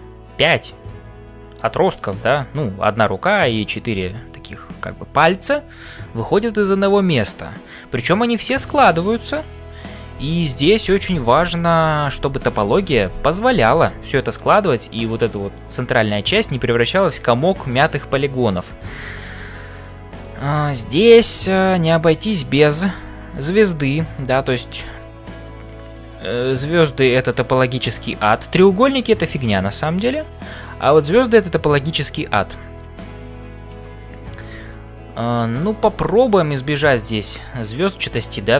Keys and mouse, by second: 0.0-38.5 typing, 18.9 shift+middle click, 36.0 click.